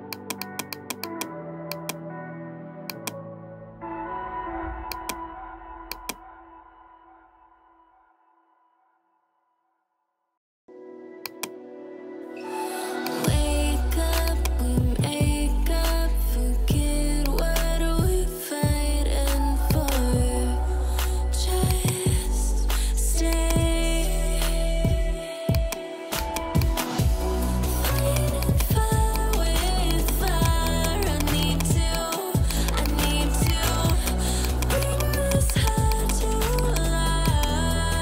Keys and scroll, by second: 15.6-16.5 typing, 18.0-18.9 typing.